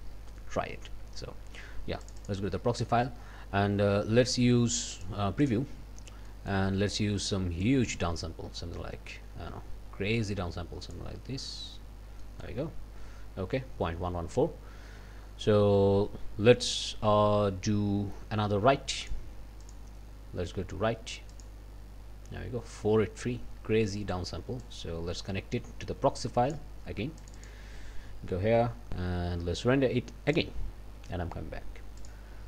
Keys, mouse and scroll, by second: 2.0 click, 4.9 click, 5.4 click, 6.3 click, 7.6-11.1 drag, 11.5 scroll down 1, 11.9 scroll up 1, 12.2 click, 19.0 click, 19.6 click, 21.3 click, 24.6-26.7 drag, 27.2 click, 30.4 click, 32.0 click.